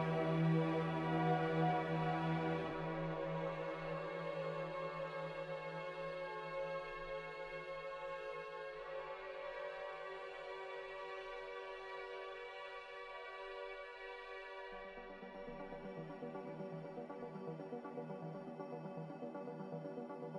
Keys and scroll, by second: 19.4 a.